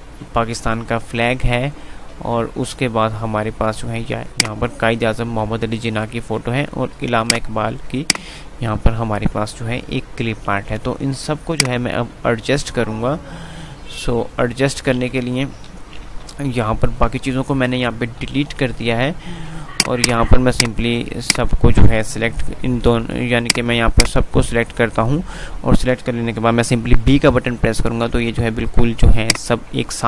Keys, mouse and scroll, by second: 4.3-11.6 drag, 11.6-15.6 alt+drag, 15.6 Delete, 16.4 F3, 16.9 F2, 18.2 click, 18.4 F2, 19.8 click, 21.2-27.1 shift+drag, 27.1 b, 29.4-30.0 drag.